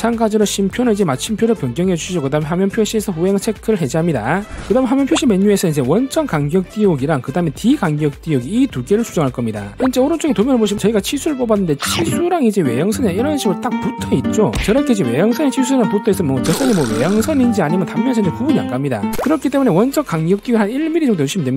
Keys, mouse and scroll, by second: 0.5 click, 1.7 click, 3.4 click, 7.0 click, 8.6 click, 9.3 click, 9.7 click, 21.1 click.